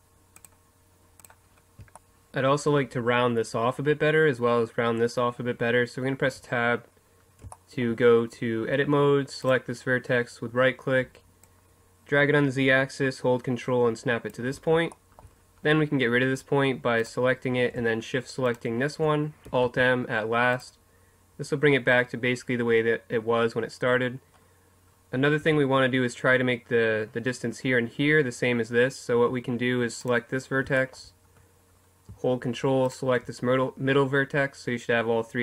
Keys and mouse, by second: 6.3 Tab, 9.4-11.4 right drag, 11.4-14.3 drag, 15.0-20.6 drag, 19.7 alt+m, 23.6-28.6 drag, 25.4 Tab, 29.2 Tab, 31.7 middle click, 33.5-34.7 right drag.